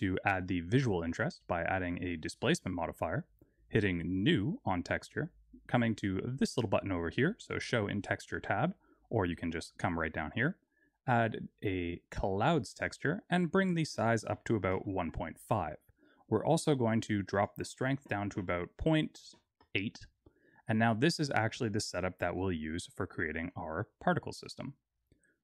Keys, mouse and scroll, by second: 1.1 click, 4.1 click, 8.1 click, 13.5 click, 16.4 click, 17.2 click, 22.3 middle click, 23.1 scroll down 1, 23.4 middle click.